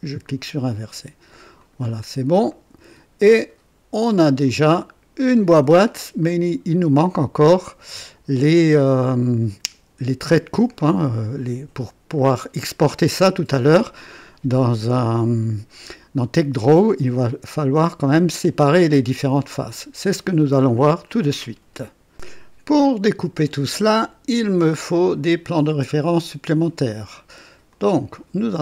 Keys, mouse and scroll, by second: 0.2 click, 1.5 click, 2.5-4.3 drag, 4.4 click, 5.7 scroll up 1, 6.2 right click, 12.1 right click, 12.1 click, 20.7 scroll down 2, 22.4-22.7 scroll up 2, 23.0 right click, 24.8-25.5 drag, 27.6 click.